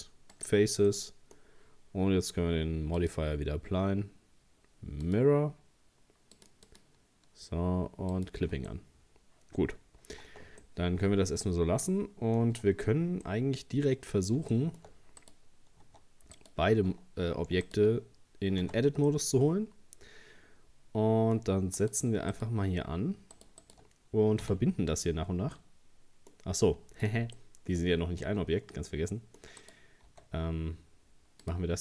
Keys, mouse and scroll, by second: 0.9-3.0 middle drag, 3.0-8.7 drag, 8.7-9.8 middle drag, 9.8-10.2 scroll up 1, 10.2 Tab, 10.6 scroll up 1, 10.6-12.5 middle drag, 12.5 Tab, 13.2-15.2 middle drag, 15.2 right click, 15.8 Tab, 16.4 right click, 17.6 shift+right click, 18.6 Tab, 19.1-21.8 middle drag, 21.8 right click, 22.3 shift+right click, 23.3 shift+right click, 23.6 shift+right click, 24.4 f, 25.6-26.6 middle drag, 26.6-27.4 scroll down 4, 27.4 middle click, 27.8-28.2 scroll up 3, 28.2 Tab, 28.4-28.9 scroll down 3, 28.9 middle click, 29.6 right click, 30.1 s.